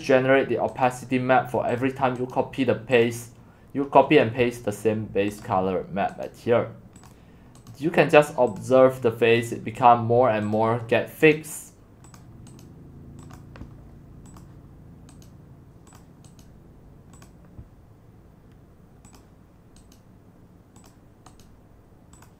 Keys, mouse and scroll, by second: 0.9 right click, 1.9-6.3 right drag, 6.7 right click, 8.6-11.3 drag, 12.3 click, 13.2-15.2 drag, 15.2 right click, 16.0 click, 16.4 right click, 17.2-19.9 drag, 19.9 right click, 20.8 click, 21.4 right click, 22.2 click.